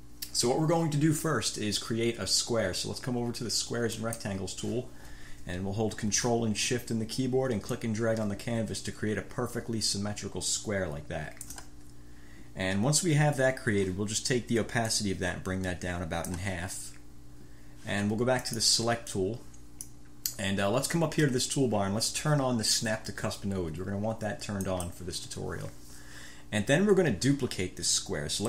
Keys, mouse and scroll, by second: 4.1 click, 7.8-11.8 ctrl+shift+drag, 15.1-16.7 drag, 18.6 click, 19.3-20.3 drag, 24.9 click.